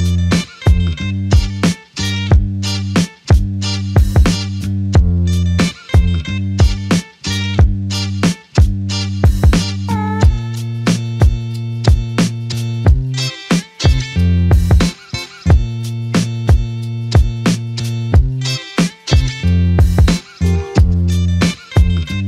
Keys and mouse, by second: 3.3 shift+click, 7.3 alt+click, 8.8 double click, 15.2 shift+click, 16.3 alt+click, 17.3 double click, 19.4 alt+click.